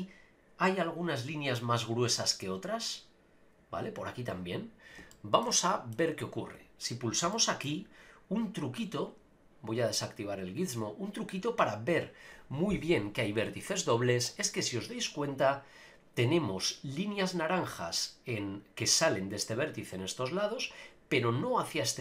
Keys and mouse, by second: 5.1 shift+middle click, 5.5 middle click, 6.6 click, 7.3 shift+middle click, 10.2-22.0 drag.